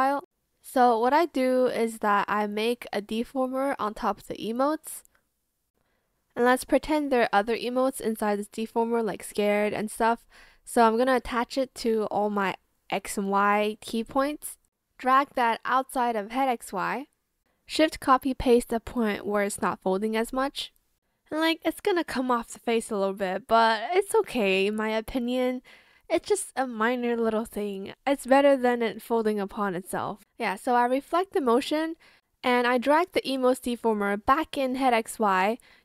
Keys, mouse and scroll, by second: 3.9 ctrl+a, 4.1-6.9 typing, 7.7 ctrl+click, 9.3 shift+click, 17.9 ctrl+shift+c, 18.2 ctrl+shift+v, 19.1 shift+click, 22.8 shift+click, 23.9 ctrl+alt+shift+z, 24.9 shift+click, 25.5 Escape, 28.4 Return, 30.7-31.4 typing, 30.9 click.